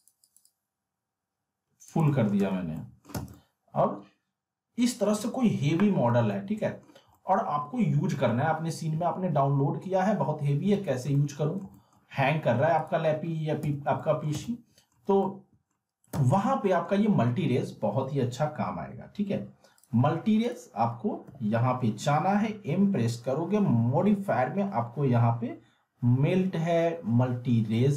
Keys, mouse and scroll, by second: 0.0-2.0 drag, 2.0 alt+middle click, 2.4 z, 2.7 alt+middle click, 3.1 z, 3.3-5.1 alt+middle drag, 6.9 scroll down 1, 7.1 alt+middle click, 10.7 z, 11.3-12.0 alt+middle click, 12.8 click, 13.6 z, 14.0 alt+middle click, 14.3 z, 14.4-15.0 middle click, 15.2-15.8 alt+middle click, 16.1 z, 16.4-17.0 alt+middle drag, 19.8 click, 21.2 m.